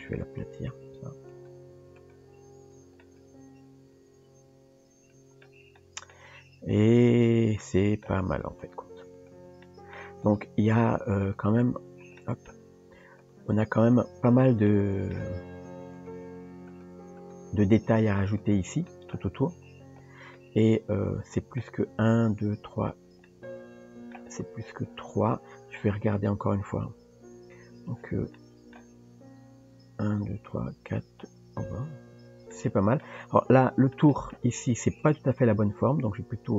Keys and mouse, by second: 0.9 r, 1.6 g, 2.8 Tab, 3.0-5.4 middle drag, 5.8-6.1 shift+middle drag, 7.2 Tab, 7.6 middle click, 9.2 shift+click, 9.7 middle click, 10.3 click, 11.2 shift+click, 12.2 middle click, 13.9 click, 14.7 middle click, 17.2 click, 17.9 r, 18.9 middle click, 20.4-21.6 middle drag, 23.3 middle click, 26.5 KP_3, 28.4 shift+middle click, 32.5 middle click, 33.6 shift+middle click, 34.1 middle click, 35.0 click, 35.8 r.